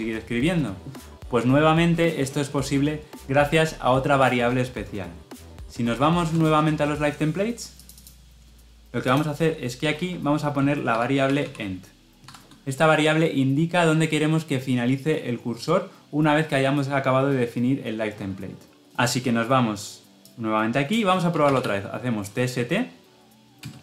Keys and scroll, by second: 23.5 Return.